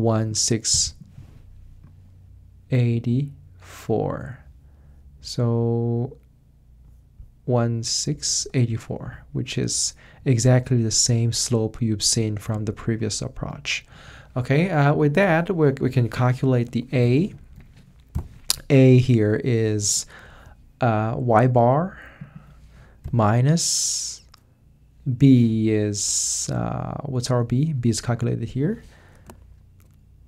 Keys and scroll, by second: 16.6 a, 17.0 Return, 17.3 Right, 17.5 Up, 18.1 =, 23.0 -.